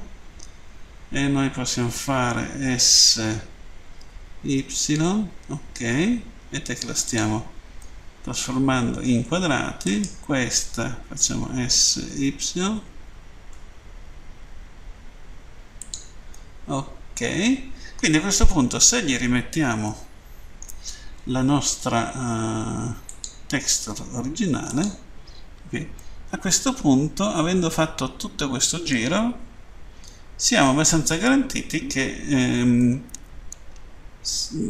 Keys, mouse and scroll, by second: 6.9 click, 7.9 middle click, 9.9 right click, 11.5 s, 15.6 click, 16.3 middle click, 18.9-19.8 scroll down 1, 19.9 shift+middle click, 23.0 click, 24.7 click, 25.9 middle click, 32.8 middle click.